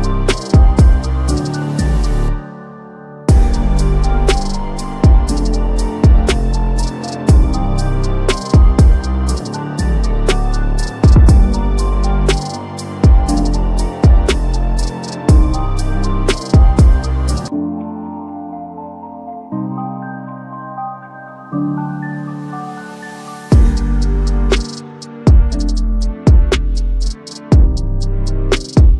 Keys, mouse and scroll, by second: 1.0-1.7 typing, 2.7-7.8 drag, 8.6 click, 9.1 right click, 10.8 click, 12.1 right click, 12.6 click, 13.2-14.4 typing, 15.1 click, 17.2-17.5 click, 17.7-18.9 typing, 19.4 click, 21.7 7, 22.8 click, 24.0 7, 25.2 click, 27.9 click.